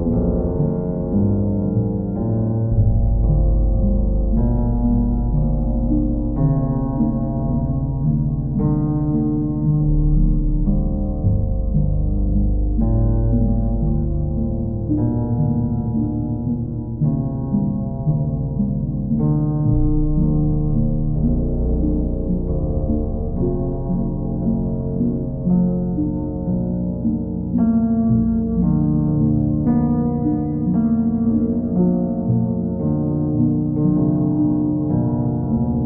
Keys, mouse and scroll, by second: 0.1 click, 0.4 click, 0.7 shift+click, 1.4 alt+click, 3.0 click, 3.6 alt+click, 5.6 alt+click, 6.4 alt+click, 7.4 alt+click, 8.5 q, 12.0 click, 12.9 click, 15.3 click, 15.8 shift+click, 16.8 alt+click, 18.1 ctrl+z, 19.0 click, 19.5 alt+click, 20.5 alt+click, 21.7 ctrl+click, 22.5 alt+click, 24.0 ctrl+click, 24.4 ctrl+click, 25.1 w, 28.3-29.5 alt+drag, 29.8-30.9 drag, 32.3 click, 34.8 ctrl+click, 35.3 ctrl+click.